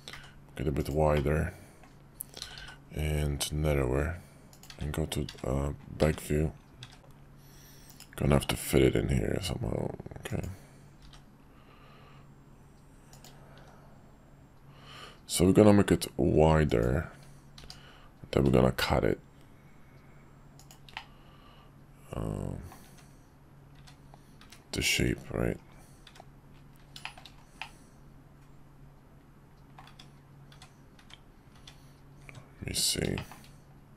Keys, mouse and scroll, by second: 1.1 middle click, 2.4 s, 4.7-7.0 typing, 8.3 s, 11.0 g, 13.5 s, 17.6 g, 20.9-22.7 middle drag, 23.8 `, 24.4 `, 26.0 `, 27.8-29.8 middle drag, 30.5 `, 31.0 `, 31.5 `, 32.2 `, 33.2 shift+middle drag.